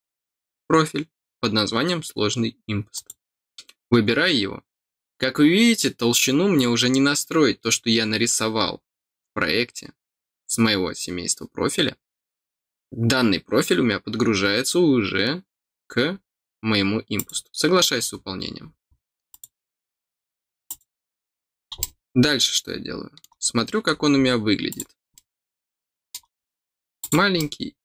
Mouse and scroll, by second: 2.9 click, 17.1 click, 18.3 scroll up 1, 18.8 scroll up 1, 19.3 click, 19.8 scroll down 1, 20.6 click, 21.2 scroll down 1, 21.7-23.2 middle drag, 23.9 scroll up 2, 24.6 click, 25.1-26.1 middle drag, 26.3 middle click, 26.6 scroll down 1, 26.9 click, 27.3-27.8 middle drag.